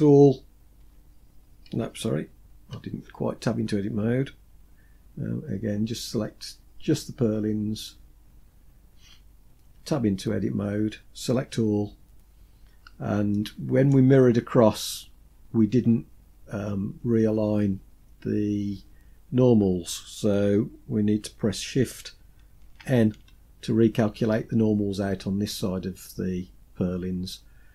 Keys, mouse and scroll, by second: 0.1 a, 7.1 click, 9.0 Tab, 10.8 a, 12.6 middle click, 17.9-19.5 scroll up 2, 21.9 shift+n.